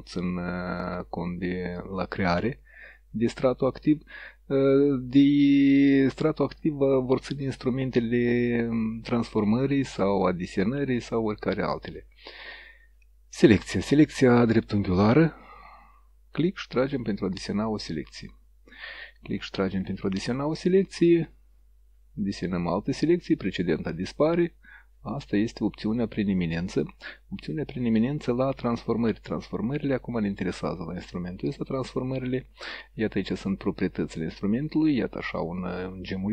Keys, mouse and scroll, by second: 15.6-18.2 drag, 21.4-22.8 drag, 23.8-25.2 drag, 25.9-26.9 drag, 28.4-31.3 drag, 34.0 click, 34.8-36.3 drag.